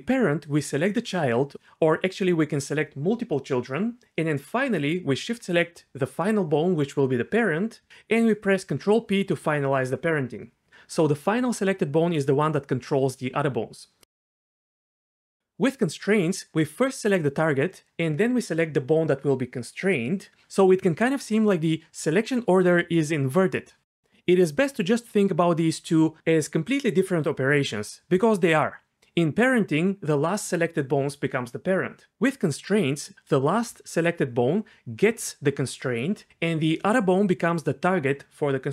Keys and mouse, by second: 2.6 shift+click, 3.2 shift+click, 4.5 shift+click, 7.3 shift+click, 8.8 ctrl+p, 12.0 Tab, 13.4 g, 15.2 g, 16.6 click, 19.8 ctrl+shift+c, 24.8 g, 27.0 click.